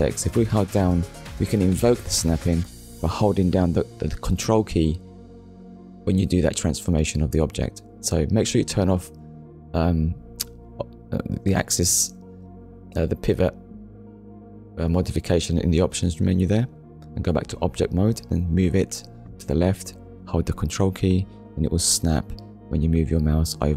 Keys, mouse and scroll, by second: 0.2 click, 1.5 middle click, 3.1 KP_1, 4.5 click, 8.6 scroll down 1, 10.5 click, 11.3 shift+middle click, 14.8 click, 15.4 click, 16.6 click, 17.7 click, 18.6 click.